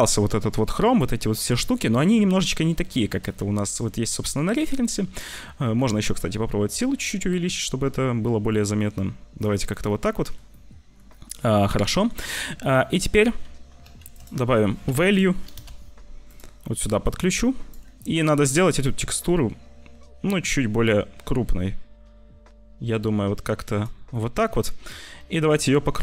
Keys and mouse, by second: 2.0 middle click, 5.9 shift+click, 6.5-9.3 shift+middle drag, 14.0 shift+a, 17.0 s, 18.9 shift+click, 19.5 shift+middle click, 23.8 shift+middle click, 24.5-25.5 middle drag.